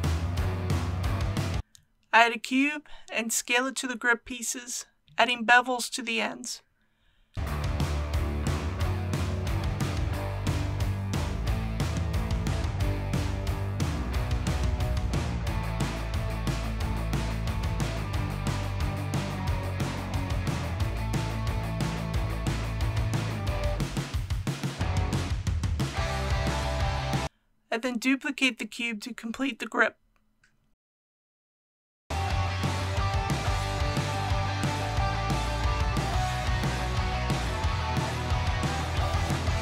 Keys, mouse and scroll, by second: 0.2 click, 1.4-1.7 scroll down 1, 2.0 shift+a, 3.8 click, 4.7 s, 7.3 click, 7.7 g, 8.4 shift+y, 9.5 click, 10.2-10.6 scroll up 1, 11.4 click, 12.3 s, 13.2 click, 13.4 typing, 15.0 click, 15.3-16.0 typing, 16.8 click, 17.6 KP_1, 19.2 click, 19.7 2, 19.9 middle click, 20.5 click, 21.4 shift+click, 21.7 middle click, 22.7 shift+click, 23.0 shift+click, 23.6 KP_1, 24.0 ctrl+b, 26.8 click, 29.2-30.1 typing, 31.9-33.2 typing, 34.3 click, 34.9 typing, 35.8 middle click, 36.2 KP_1, 36.5 shift+d, 36.9 g, 37.1 shift+y, 38.4 click, 38.6-39.6 typing.